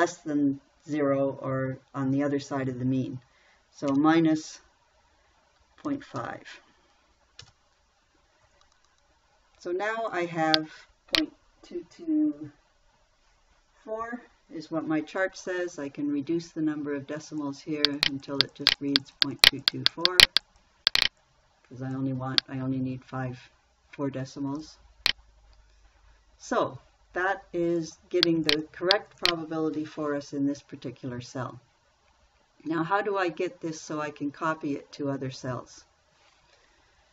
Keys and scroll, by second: 4.3 -, 6.3 ., 6.6 5, 7.9 Return.